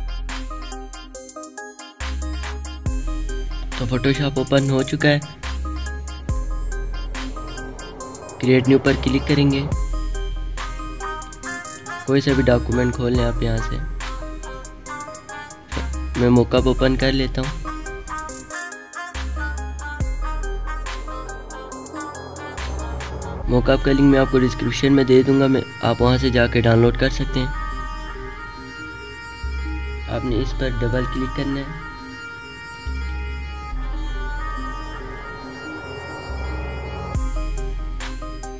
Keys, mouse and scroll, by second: 8.3 click, 11.0 click, 11.8 click, 22.0 scroll, 22.1 scroll down 1, 22.5 click, 34.8 click.